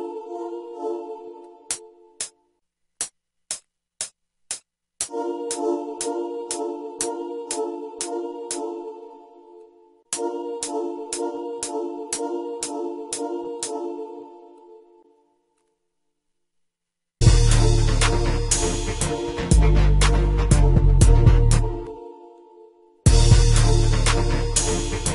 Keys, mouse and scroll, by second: 9.2 space, 11.7 F5, 11.8 F6, 16.1 F1, 18.9 F1.